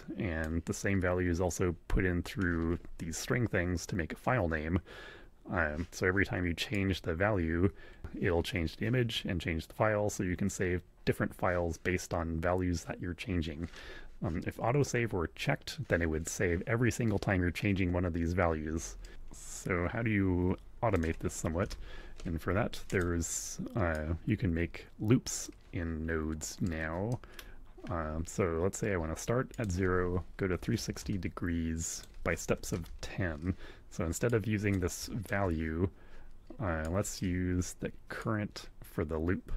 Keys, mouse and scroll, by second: 6.7-8.0 drag, 19.0-21.1 drag, 21.6 shift+a, 22.8 click, 23.9-25.6 drag, 26.6 click, 27.0 middle click, 29.5 click, 30.0-31.2 typing, 31.9 click, 32.2-33.1 typing, 34.2 click, 35.0 ctrl+click, 36.8 click, 38.2-39.5 drag.